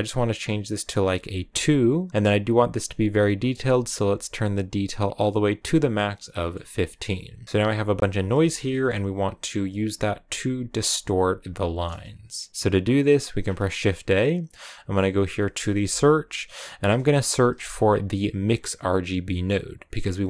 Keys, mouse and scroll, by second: 1.3 click, 5.1-6.2 drag, 6.2 scroll down 1, 6.3-8.5 middle drag, 8.5-9.6 scroll down 2, 10.8-18.9 drag.